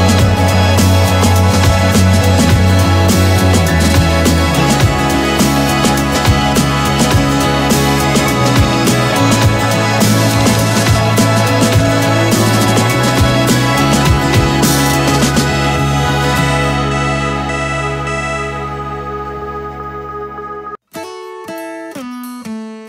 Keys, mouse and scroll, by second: 1.3 Up, 1.6 Down, 2.7 Up, 7.5 Down, 8.4 Up, 9.2 Down, 10.6 t, 11.7 click, 12.4 \, 13.0 BackSpace, 15.5-16.7 typing, 18.8 click, 20.5 t, 21.1 click.